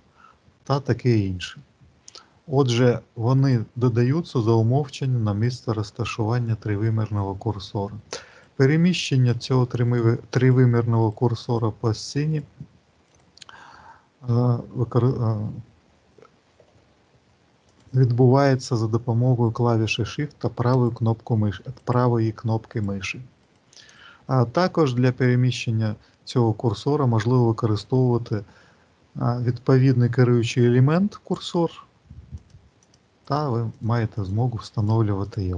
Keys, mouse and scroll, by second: 1.4 middle click, 3.2 shift+right click, 8.2 shift+right click, 8.7 shift+right click, 9.2 shift+right click, 9.7 shift+right click, 10.4 shift+right click, 10.9 shift+right click, 11.4 shift+right click, 11.9 shift+right click, 12.2 shift+right click, 13.0 shift+right click, 17.5 click, 20.6 shift+right click, 21.6 shift+right click, 22.6 shift+right click, 23.2 shift+right click, 23.7 shift+right click, 31.1 click, 32.2 click, 32.7 click, 33.1 click, 33.5 click, 34.1 click, 34.6 click, 35.1 click.